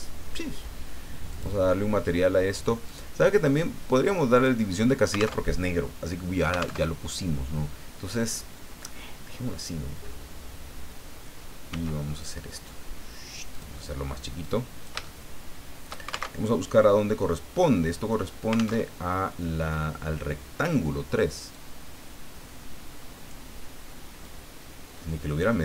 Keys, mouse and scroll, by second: 1.3 click, 2.8 click, 4.3 click, 5.4 alt+Tab, 6.8 alt+Tab, 11.7 s, 13.5 click, 14.4 click, 15.0-16.3 shift+middle drag, 16.3 alt+shift+Tab, 18.8 alt+Tab, 19.9 scroll down 2, 21.5-23.5 drag, 24.2-25.6 drag.